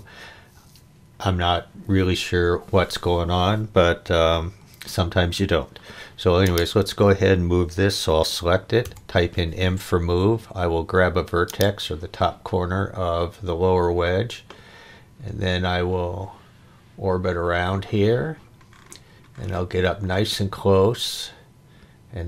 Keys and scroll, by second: 8.8 m.